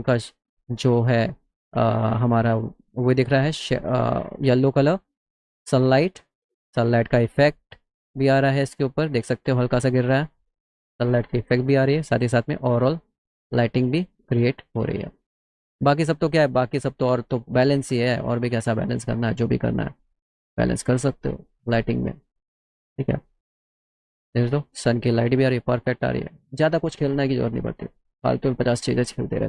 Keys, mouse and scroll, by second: 9.5 middle click, 13.6 middle click, 14.2 middle click, 17.7 click.